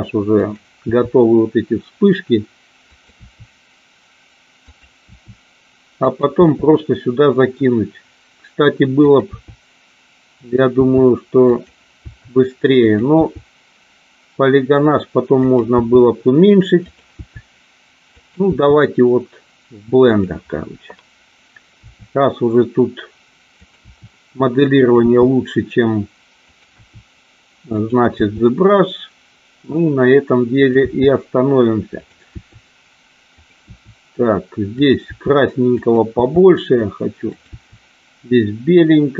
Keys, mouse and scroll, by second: 0.4 click, 0.8 e, 2.9 click, 3.2 e, 4.6 click, 4.9 e, 5.9 click, 6.3 e, 9.0 click, 9.3 e, 10.7 e, 11.4 click, 11.9 e, 12.8 click, 13.1 e, 15.7 e, 17.2 e, 18.1 click, 18.4 e, 20.1 click, 21.7 e, 23.5 click, 23.8 e, 24.8 click, 24.9 e, 26.4 click, 26.6 e, 27.7 click, 28.2 e, 30.6 click, 30.8 e, 31.9 click, 32.2 e, 33.6 e, 34.7 click, 35.1 e, 35.7 click, 36.2 e, 37.3 click, 37.4 e.